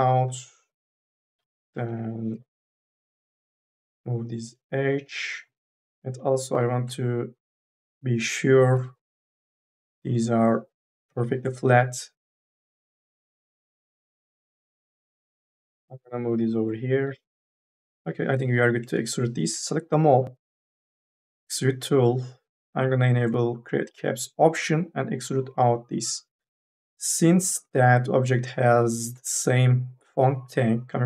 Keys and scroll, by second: 1.5 1, 1.7 2, 5.3 3, 8.6 t, 14.9 F1, 15.2 2, 15.6 e, 17.9 3.